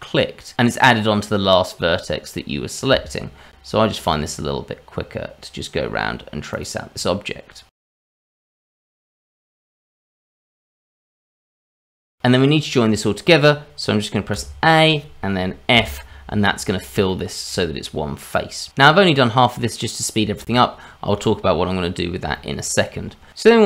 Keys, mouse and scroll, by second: 0.4 ctrl+right click, 1.0 shift+middle click, 3.7 ctrl+right click, 4.5 ctrl+right click, 5.1 ctrl+right click, 5.6 ctrl+right click, 6.0 ctrl+right click, 6.5 ctrl+right click, 6.8 ctrl+right click, 7.1 ctrl+right click, 7.4 ctrl+right click, 7.6 ctrl+right click, 8.0 ctrl+right click, 8.5 ctrl+right click, 8.8 ctrl+right click, 9.2 ctrl+right click, 9.5 ctrl+right click, 9.8 ctrl+right click, 10.4 ctrl+right click, 11.7 ctrl+right click, 11.7-12.0 scroll down 3, 11.8 shift+middle click, 12.0 scroll up 1, 12.2 ctrl+z, 14.3 a, 15.7 f, 16.7 shift+middle click, 17.4-17.7 scroll up 1, 17.8 shift+middle click, 18.5-18.8 scroll down 2, 18.9 shift+middle click, 19.7 shift+middle click, 20.5 shift+middle click, 22.3 shift+middle click, 23.0 scroll up 2, 23.4-23.6 scroll down 2.